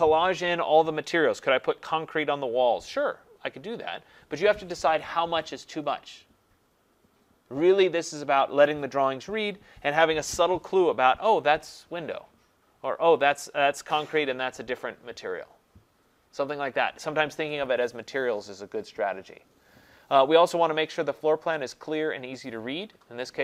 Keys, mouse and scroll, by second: 0.4 scroll down 1, 1.7 scroll, 19.7-21.7 scroll.